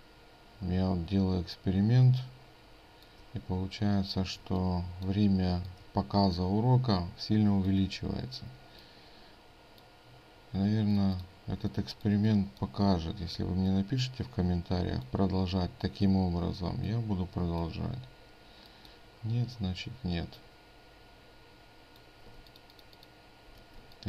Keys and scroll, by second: 10.7 ctrl+space, 22.3 ctrl+space.